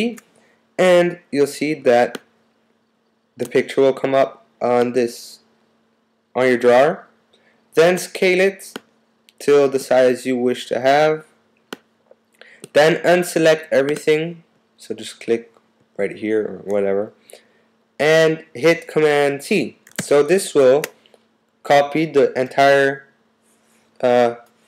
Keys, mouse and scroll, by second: 8.7 click, 9.1 click, 20.0 super+c.